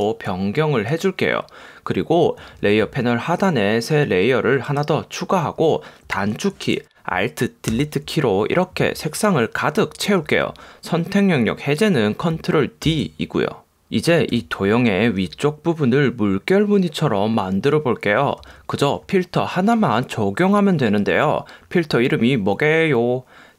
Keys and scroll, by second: 7.8 alt+BackSpace, 13.0 super+d, 14.4 v.